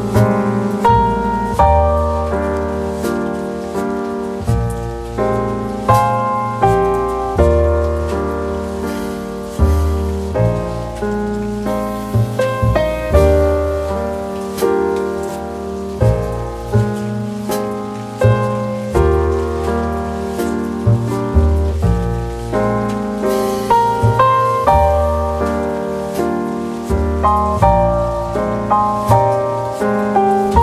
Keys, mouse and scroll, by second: 17.4 shift+click.